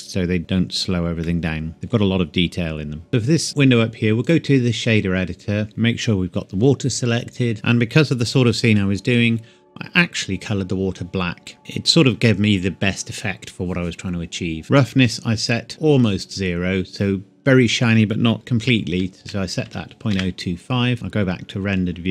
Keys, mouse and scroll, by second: 0.4-0.9 scroll up 1, 0.9 scroll down 1, 1.2 middle click, 1.7-3.1 scroll up 1, 5.7 click, 7.5-8.4 scroll up 1, 11.5-12.0 scroll up 1, 12.0 click, 14.6-15.1 scroll up 1, 15.1 click, 18.3 KP_Decimal, 18.6 KP_0, 19.2 KP_2, 19.7 KP_5, 20.1 KP_Enter, 20.9 click.